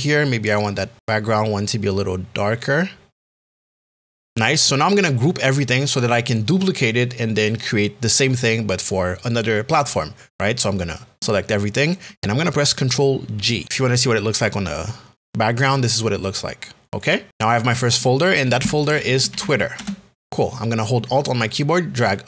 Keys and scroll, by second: 14.0 g, 18.6 t, 19.4 r.